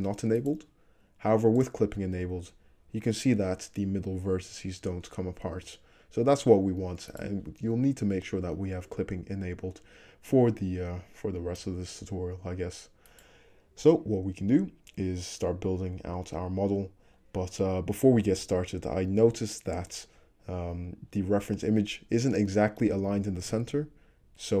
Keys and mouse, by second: 1.7 click, 2.2 g, 13.2 click, 15.0 click, 15.6 middle click, 16.0 click, 16.1 middle click, 17.2-21.7 drag, 21.7-24.6 shift+middle drag.